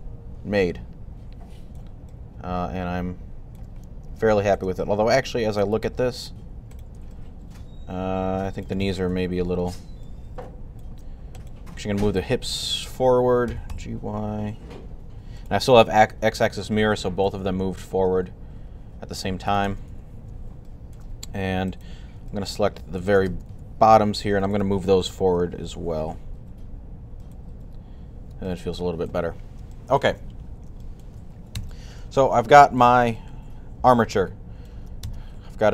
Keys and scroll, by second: 8.9 3, 13.1-14.0 typing, 19.7 typing, 23.3 typing, 24.7-25.5 typing.